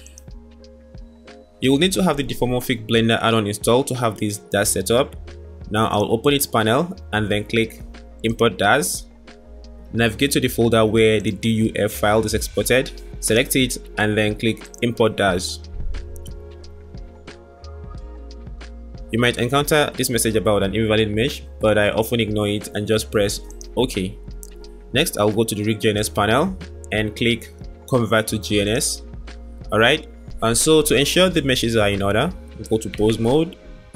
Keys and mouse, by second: 6.0 click, 33.0 Tab.